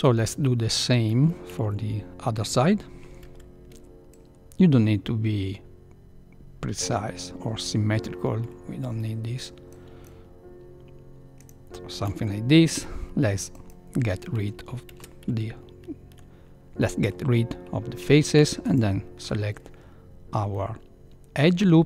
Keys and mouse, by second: 0.1-0.7 shift+middle drag, 1.4 a, 1.6 a, 3.2 c, 12.7 x, 14.9 ctrl+2, 18.6 alt+click, 20.4-21.4 middle drag.